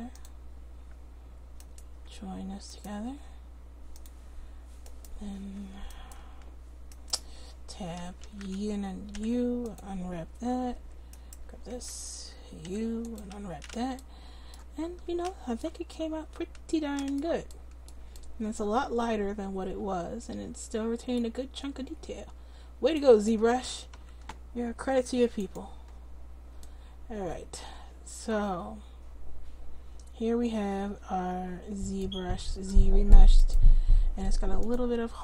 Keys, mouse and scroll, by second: 4.5 click, 7.4 Tab, 8.0 a, 8.3 a, 9.2 u, 10.8 Tab, 11.2 click, 11.7 Tab, 12.7 u, 14.9 Tab, 23.7 a, 24.0 a, 32.4-33.5 middle drag, 33.5 right click.